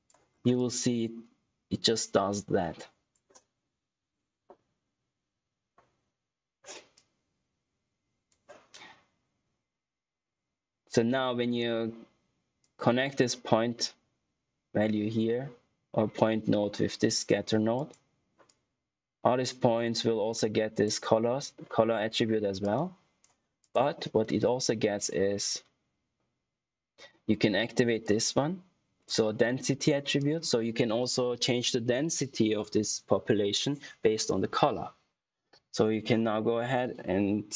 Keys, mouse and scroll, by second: 0.2 scroll down 1, 0.5 click, 7.2 shift+Num_Lock, 7.2 shift+click, 12.7 shift+Num_Lock, 12.7 shift+click, 27.9 shift+click.